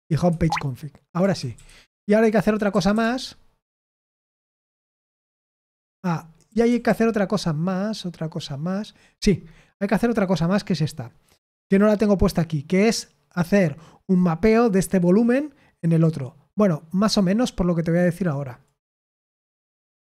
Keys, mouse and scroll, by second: 0.2 Escape, 1.1-3.4 typing, 4.5 ctrl+p, 5.7 Return, 6.6 typing, 10.2 click, 17.1-18.6 drag.